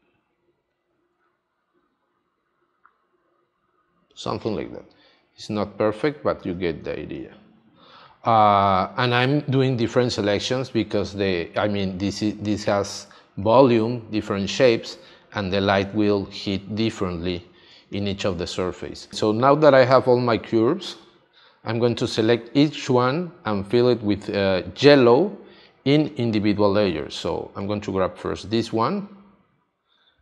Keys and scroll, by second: 6.8 space, 13.0 space, 16.0 space.